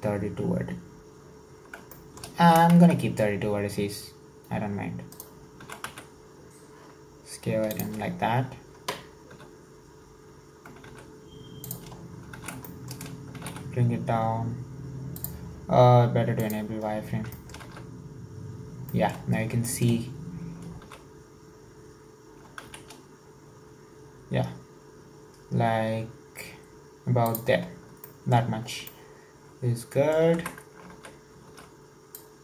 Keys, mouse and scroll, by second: 2.0 shift+middle click, 2.4 s, 5.6 s, 9.3 s, 12.0-12.3 scroll up 4, 12.3 alt+z, 12.7 shift+middle click, 13.4 g, 16.5 click, 17.4-17.9 shift+middle drag, 17.9 alt+z, 18.0-18.6 scroll up 3, 18.9-19.3 shift+middle drag, 19.3 scroll up 1, 19.7 shift+middle click, 19.9-20.4 scroll up 2, 20.7 scroll up 3, 20.8 s, 27.7 scroll down 5, 28.0-28.7 shift+middle drag, 28.9-30.4 shift+middle drag, 30.4 Tab, 30.9 alt+z, 31.5 alt+z, 32.2 click.